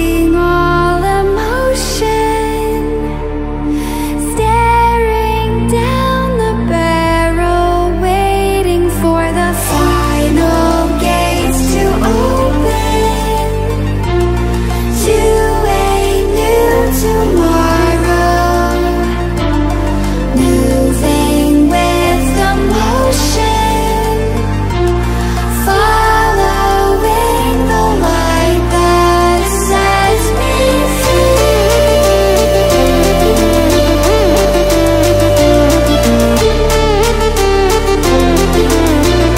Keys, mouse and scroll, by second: 1.6-2.5 drag, 3.4-4.0 ctrl+alt+scroll down 1, 5.1 ctrl+alt+scroll up 1, 5.6-5.9 ctrl+alt+scroll down 1, 6.3-6.6 ctrl+alt+scroll up 1, 7.0 space, 7.3 click, 7.6-7.9 space, 8.7 click, 9.9 ctrl+alt+scroll down 1, 10.6-11.9 drag, 19.9-25.7 drag, 26.4-27.1 typing, 29.5 click, 33.9-34.5 drag, 38.2 ctrl+alt+scroll up 1.